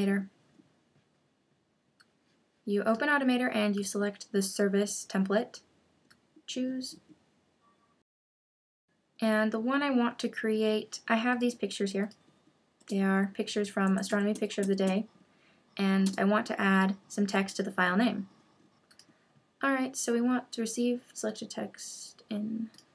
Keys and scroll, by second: 13.5 Down.